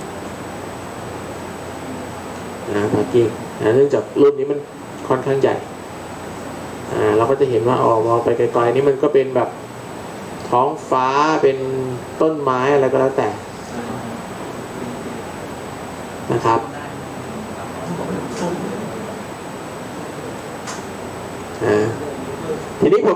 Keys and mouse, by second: 0.0 click, 1.6-5.3 middle drag.